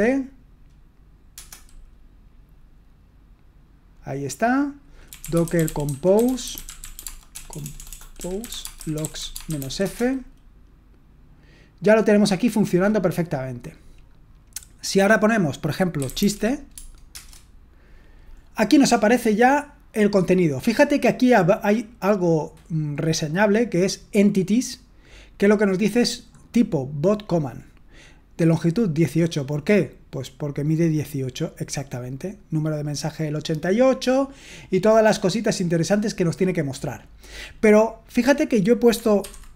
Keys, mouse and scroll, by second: 0.0-0.2 typing, 5.1-10.1 typing, 15.9-16.7 typing, 16.7 Tab, 17.1 Return.